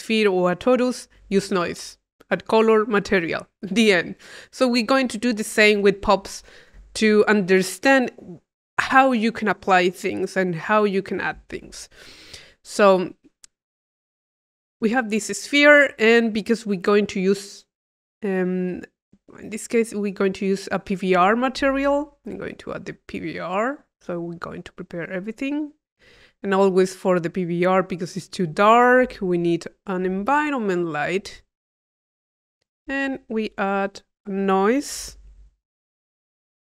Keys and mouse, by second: 12.4-14.0 drag, 14.4-16.0 drag, 19.4 click, 21.4 click, 21.6 Tab, 22.8 click, 23.8 click, 24.3 click, 24.7 click, 26.5 click, 28.9 click, 29.1 Tab, 29.9 click, 31.1-32.2 drag, 32.4 click, 32.9 Tab, 34.4 click, 35.4 i, 36.1 click.